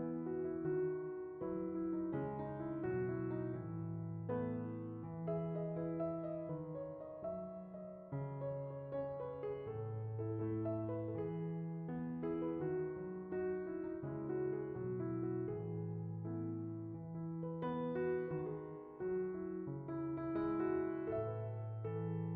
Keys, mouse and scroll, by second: 1.4 shift+d, 2.8-3.9 drag, 6.7-8.7 middle drag, 8.7-9.1 drag, 11.9 click, 13.7-14.6 scroll down 3, 14.6-15.6 middle drag, 15.6-16.2 drag, 19.2-20.2 scroll down 5, 20.6-21.5 middle drag, 21.5 scroll.